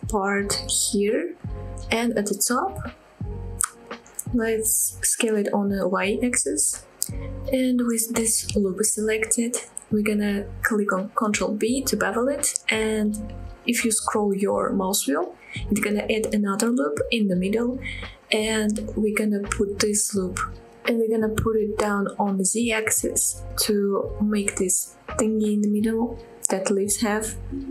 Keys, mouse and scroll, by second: 0.2 y, 1.5 click, 2.2 click, 3.2 g, 3.4 y, 4.2-5.7 scroll up 3, 5.9 click, 6.2-6.8 scroll down 2, 6.9 middle click, 7.4 click, 7.6 click, 7.7 ctrl+z, 7.7-8.1 scroll down 1, 8.1 click, 8.5-9.0 scroll up 1, 9.0 click, 9.3 click, 9.8 middle click, 11.4 ctrl+b, 12.9-13.5 scroll down 1, 13.5-13.9 scroll up 1, 15.9 click, 16.5 click, 16.8 click, 17.9 g, 18.5 z, 21.9 click, 22.2-23.4 middle drag, 23.5 Tab, 24.0 click, 24.2-24.8 middle drag, 24.9-25.7 middle drag, 25.9-26.8 middle drag, 27.1 click, 27.5 Tab.